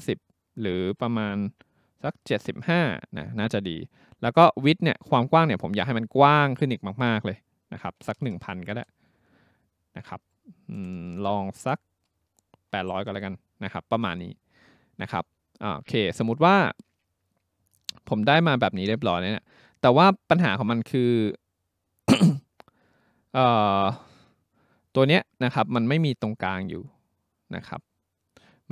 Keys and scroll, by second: 2.0-3.0 typing, 7.7-8.7 typing, 10.8 BackSpace, 11.0 BackSpace, 12.5-13.4 typing.